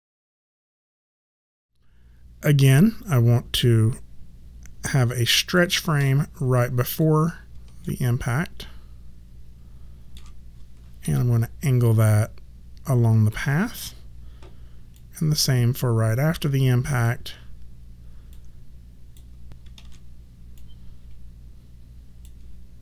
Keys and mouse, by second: 6.8 click, 7.8 ctrl+middle click, 11.0 e, 14.9 click, 18.3 click, 19.5 ctrl+middle click, 19.7 ctrl+z, 20.5 click.